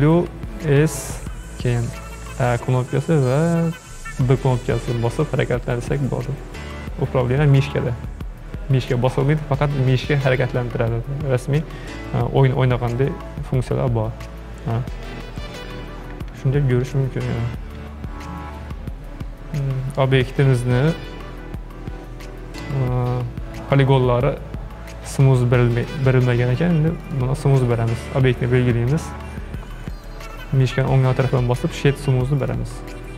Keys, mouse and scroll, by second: 27.1 click, 29.9-33.1 right drag.